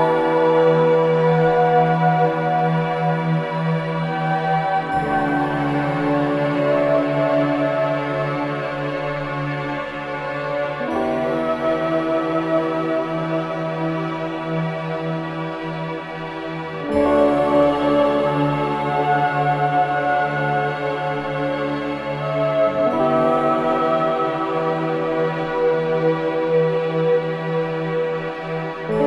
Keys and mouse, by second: 0.0 click, 1.5 click, 5.7 Tab, 7.5 ctrl+a, 9.0-11.3 typing, 12.9-15.0 typing, 16.8 click, 18.7 typing, 19.7 typing, 21.0-23.7 drag, 24.7-25.2 typing, 26.6 click.